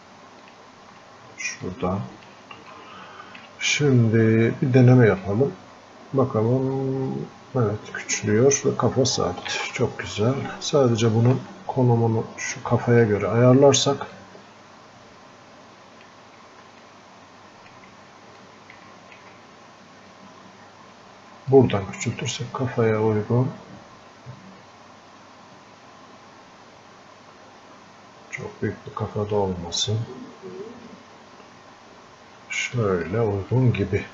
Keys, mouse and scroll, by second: 3.1-5.6 alt+drag, 5.6-11.6 drag, 11.6-34.1 alt+drag.